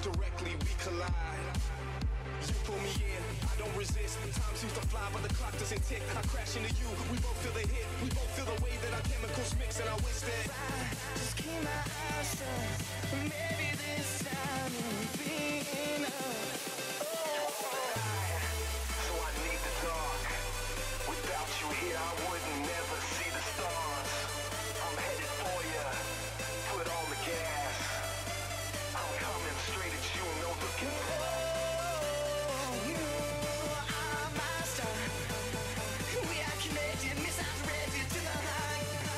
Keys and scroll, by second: 4.8 z, 14.5 z, 21.3 ctrl+z.